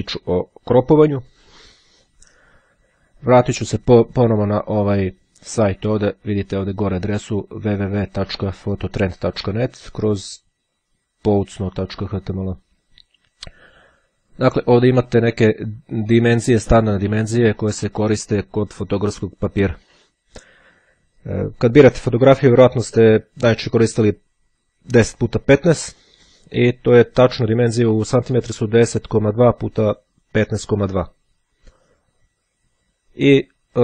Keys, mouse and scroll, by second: 0.0-0.5 ctrl+scroll up 2, 3.2 click, 15.1-17.0 drag.